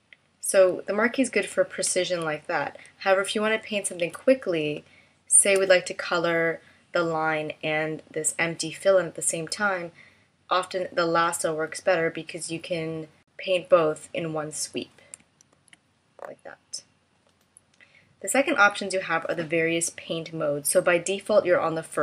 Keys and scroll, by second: 0.5 super+z, 1.5 super+z, 4.8 space, 15.3 super+z.